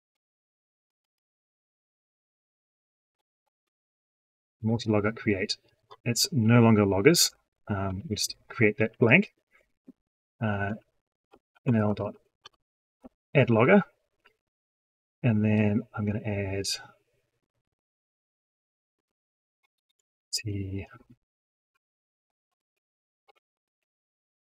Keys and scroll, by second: 22.4 ctrl+super+space, 23.4 ctrl+space.